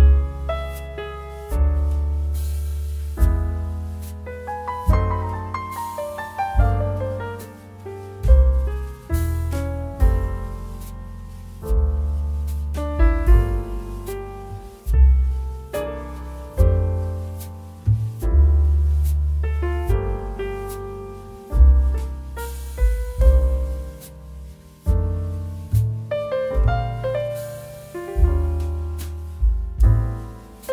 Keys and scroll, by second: 9.9 Return.